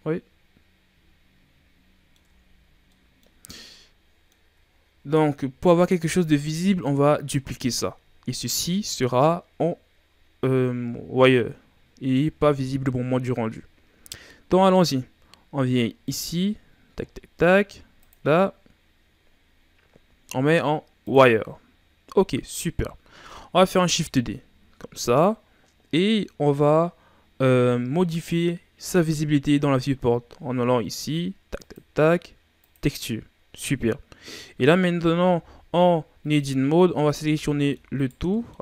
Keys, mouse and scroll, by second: 2.2 Tab, 2.5-2.8 scroll down 2, 2.8-6.6 middle drag, 6.6-7.2 ctrl+scroll up 2, 16.0 click, 16.5-17.9 scroll down 10, 17.9-21.1 drag, 22.5-23.9 middle drag, 23.9 shift+d, 31.5-34.7 drag, 36.7 a, 37.1 a, 37.4-37.9 middle drag, 37.9 right click, 38.3-38.6 middle drag.